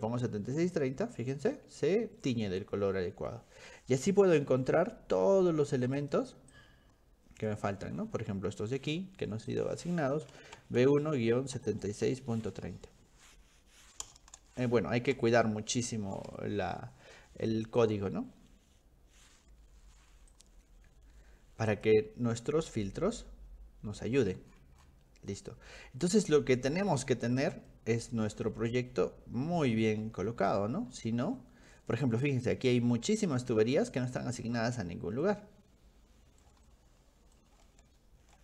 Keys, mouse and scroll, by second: 1.4 middle click, 1.9 middle click, 2.2 middle click, 2.5 middle click, 2.9 middle click, 3.9 middle click, 4.7 scroll up 2, 5.4 scroll up 2, 6.0 click, 6.5 click, 9.5 click, 10.1-16.2 typing, 17.8 click, 20.4 click, 21.7 click, 22.6-23.6 scroll up 3, 23.9-25.0 scroll down 3, 24.5 middle click, 24.8 middle click, 25.3 middle click, 26.4-27.5 middle drag, 27.7 middle click, 28.5-29.9 shift+middle drag, 30.2-30.5 scroll up 2, 30.9 middle click, 31.2 scroll up 2, 33.5 scroll down 2, 33.6 scroll up 2, 33.9-34.8 scroll down 6, 35.2-36.5 shift+middle drag, 36.7 middle click, 37.7 shift+middle click.